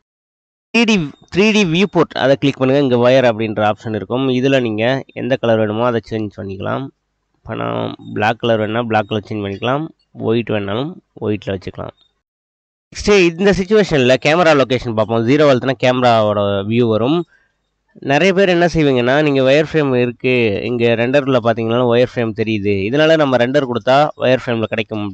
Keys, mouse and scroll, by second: 14.4 KP_0, 19.4 click, 24.0-25.1 drag.